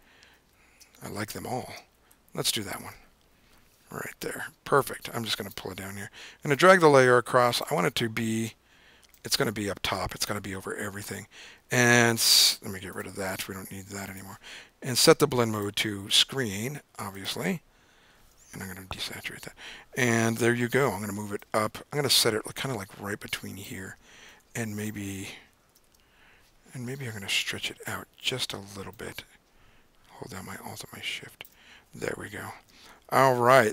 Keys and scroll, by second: 0.3 Down, 0.8 Down, 1.3 Down, 1.8 Down, 2.1 Up, 2.9 Return, 19.1 shift+super+u, 20.4-20.9 typing, 24.6 super+t, 25.2 super+t, 25.6 super+-, 25.8 super+-, 33.0 super+=, 33.2 super+=.